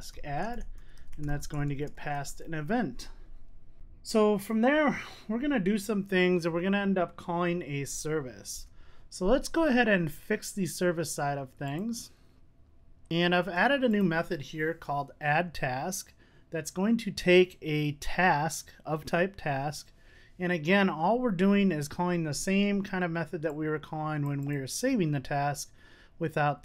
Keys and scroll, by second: 8.7 super+s.